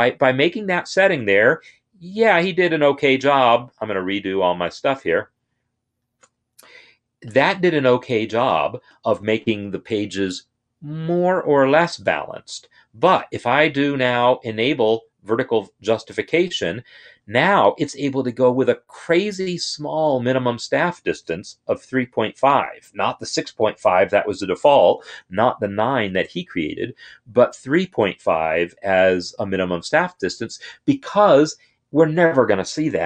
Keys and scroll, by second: 2.3 ctrl+shift+z, 2.8 ctrl+shift+z.